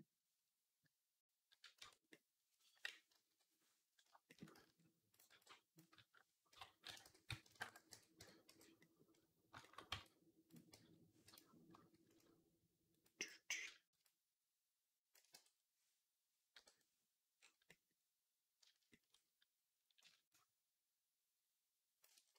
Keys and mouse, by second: 1.6 Tab, 2.9 KP_1, 3.1 /, 4.4 z, 5.1 b, 6.0-9.6 right drag, 6.4 ., 6.9 s, 7.6 x, 8.1 Tab, 8.3 z, 9.6-12.8 drag, 9.8 Tab, 10.6 g, 11.6 a, 12.8-16.6 right drag, 12.9-16.6 drag, 12.9-16.6 middle drag, 15.2 Tab, 16.6 /.